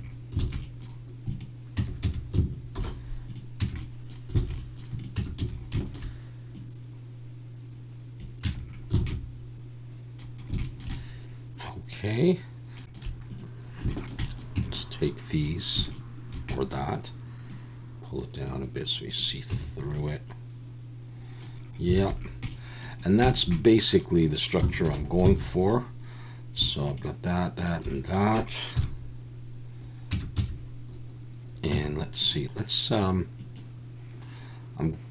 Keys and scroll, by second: 0.4 alt+a, 1.8 Tab, 2.0 a, 2.8 alt+n, 3.6 Tab, 4.5 alt+a, 5.2 Tab, 5.4 a, 8.6 Tab, 9.0 alt+a, 14.6 Tab, 19.5 Tab, 22.0 alt+a, 24.9 alt+h, 25.4 alt+a, 28.8 KP_1, 30.1 Tab, 30.4 a, 31.7 Tab.